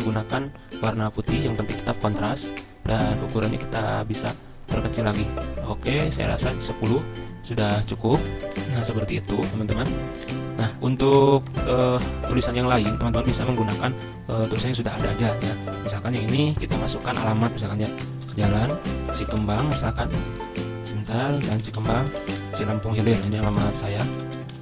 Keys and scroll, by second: 16.7 ctrl+a, 17.7-24.6 typing.